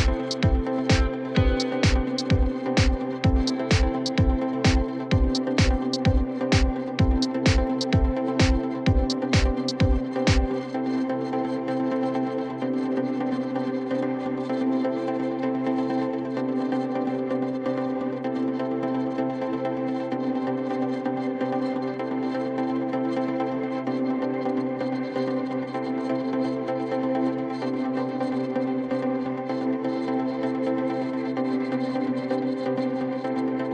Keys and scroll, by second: 0.3 F4, 6.9 F3, 10.1 F3, 10.4 2, 14.7 1, 16.5 ctrl+shift+e, 17.9 ctrl+shift+e, 23.1 ctrl+BackSpace, 23.9 alt+1, 26.1 1, 27.7 ctrl+z, 28.6 ctrl+z, 29.7 ctrl+z, 30.2 alt+1.